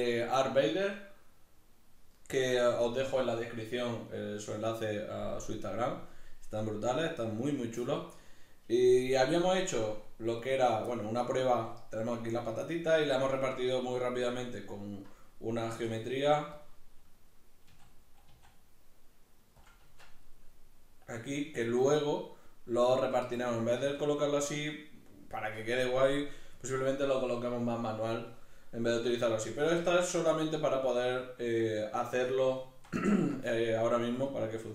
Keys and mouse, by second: 10.4 right click, 10.9-16.7 middle drag, 15.6 Tab, 16.7 click, 17.6 a, 19.7 click, 19.8 Tab, 20.3-34.2 middle drag, 23.8 alt+q, 34.2 right click.